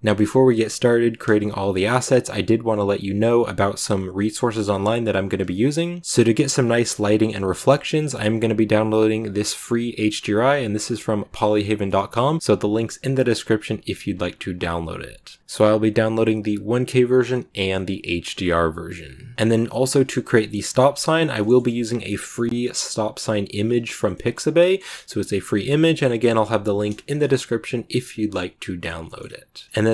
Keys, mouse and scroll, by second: 0.0-5.8 shift+middle drag, 5.8 click, 6.0-6.7 scroll up 2, 6.0 middle click, 6.7-18.7 middle drag, 18.7 click, 19.3-28.0 shift+middle drag, 28.0 scroll down 1, 28.1 middle click, 29.1 scroll up 1, 29.7-29.9 middle drag.